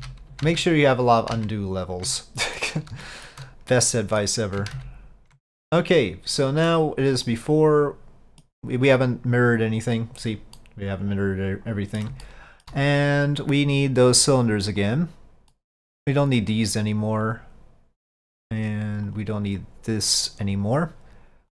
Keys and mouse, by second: 2.3-2.7 middle drag, 3.1 middle drag, 4.0-4.3 middle drag, 4.8 ctrl+z, 5.6-6.8 middle drag, 7.3-8.5 middle drag, 9.8-10.7 drag, 10.7-12.1 middle drag, 12.3-12.7 shift+middle drag, 14.9 click, 15.4 click, 18.4 click.